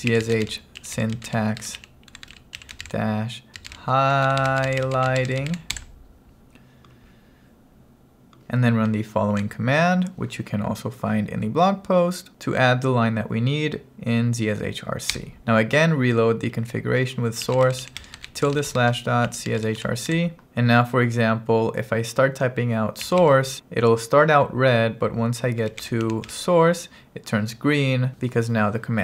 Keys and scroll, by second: 0.0-5.6 typing, 5.8 Return, 9.3 super+v, 15.2 Return, 16.9-20.6 typing, 22.8-23.7 typing, 25.5-26.8 typing.